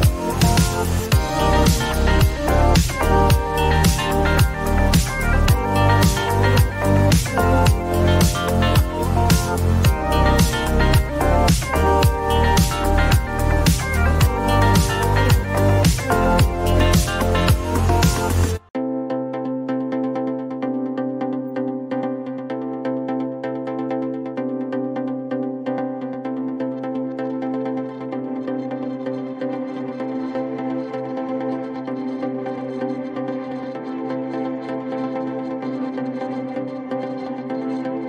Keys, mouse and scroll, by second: 3.7-4.5 typing, 20.1-22.0 typing, 28.5 4, 31.5 click, 31.6 click, 35.0 click, 36.6-38.0 typing.